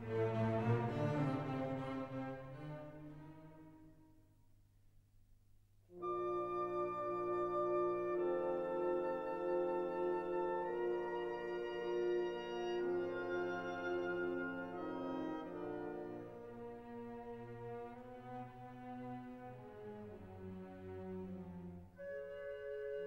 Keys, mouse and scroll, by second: 7.2 scroll down 1, 8.2-12.1 drag, 12.1 click, 13.1 scroll up 1, 14.2 middle click, 14.8 scroll down 1, 15.5-23.0 drag.